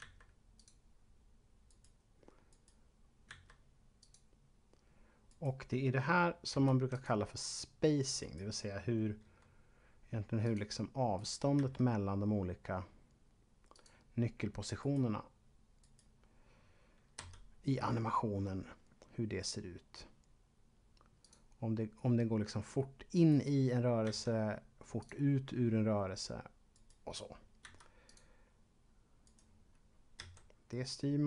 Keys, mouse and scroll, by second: 0.6 click, 1.7 right click, 2.4 right click, 3.2 s, 3.9 click, 5.2 right click, 6.4 v, 6.9 click, 8.2 right click, 9.2 g, 10.4 click, 11.1 right click, 11.4 g, 13.7 click, 14.7 right click, 15.7 right click, 17.2 g, 21.2 click, 23.1 right click, 23.9 s, 24.9 click, 26.7 right click, 27.6 v, 27.9 click, 29.2 right click, 30.2 g.